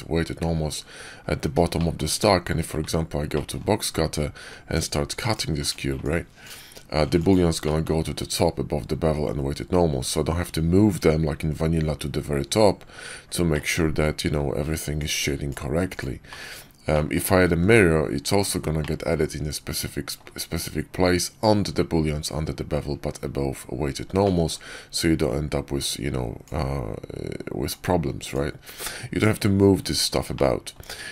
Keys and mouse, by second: 1.7 shift+middle click, 2.7 alt+w, 3.2 drag, 4.0-5.3 drag, 5.5 click, 5.9-7.2 drag, 7.5 middle click, 13.4-14.2 middle drag, 14.9-15.9 drag, 16.2 middle drag, 16.8 middle click, 17.5 alt+x, 18.3 click, 18.7-20.1 middle drag, 24.1 middle click, 25.7-26.4 drag, 27.6-28.2 drag, 30.2-30.7 middle drag.